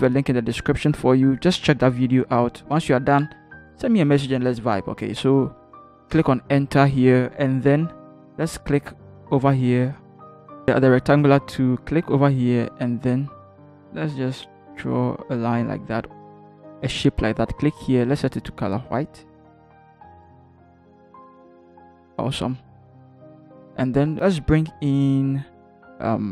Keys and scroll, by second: 6.2 Return.